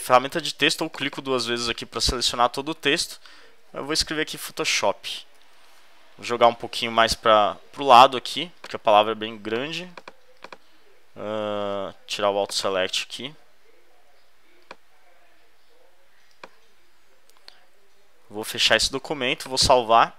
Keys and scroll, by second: 3.6 d, 4.7 d, 5.3 super+Return, 6.3 super+v, 6.8 shift+Left, 18.2 super+w.